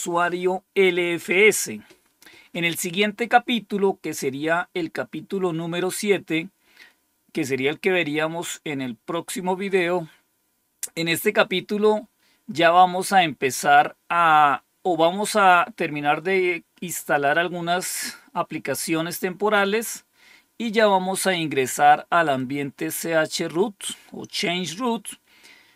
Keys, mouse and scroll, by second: 3.8-5.1 scroll down 1, 10.1-10.6 scroll down 1, 22.3-23.6 drag.